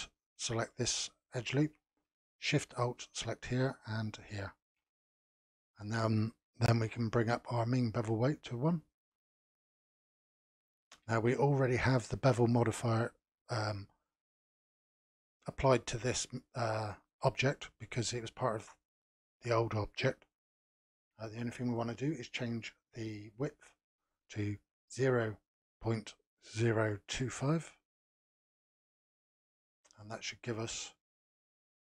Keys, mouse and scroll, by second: 3.0 alt+shift+click, 4.2 alt+shift+click, 5.4-6.8 scroll down 1, 6.8 n, 8.0-9.4 drag, 9.4-10.4 scroll up 2, 10.4-13.5 shift+middle drag, 21.6-24.7 drag, 29.5-30.0 scroll up 3, 30.0-31.6 shift+middle drag, 31.6 scroll up 2.